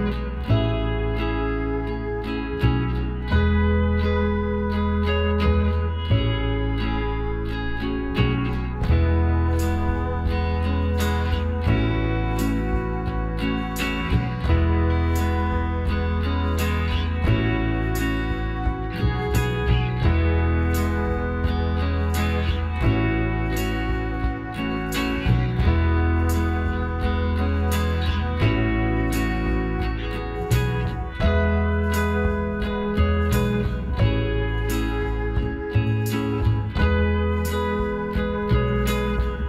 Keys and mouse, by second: 0.7-2.7 drag, 2.2 middle click, 2.7-3.9 middle drag, 5.1 KP_1, 6.8 s, 9.3-12.3 drag, 10.7-13.3 right drag, 12.3 s, 14.5-17.5 drag, 16.0-18.6 right drag, 17.5 s, 19.8-22.2 drag, 22.2-25.6 right drag, 24.3-26.8 drag, 25.6 s, 27.8-30.0 right drag, 29.2 s, 32.5 shift+r, 35.9-37.7 middle drag, 38.1 KP_7, 38.8-39.4 middle drag.